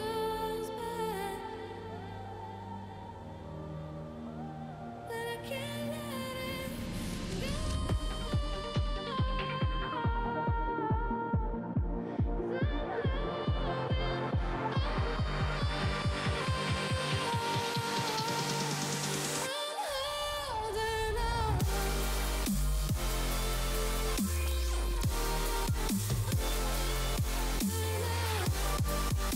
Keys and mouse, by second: 0.6 click, 1.7 alt+click, 2.1 alt+click, 3.5 click, 5.9 click, 7.0 click, 8.7 click, 13.0 click, 13.6 click, 14.1 click, 14.9 click, 15.5 click, 16.2 click, 18.0 space, 19.1 click, 19.3 Delete, 20.7 click, 23.5 click, 24.1 click, 24.8 click, 25.8 click.